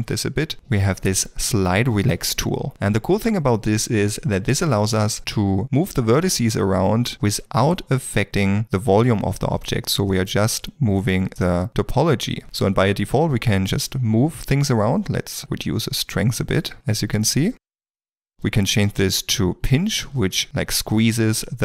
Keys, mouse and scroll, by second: 2.9 f, 4.4 ctrl+middle click, 12.4 ctrl+z.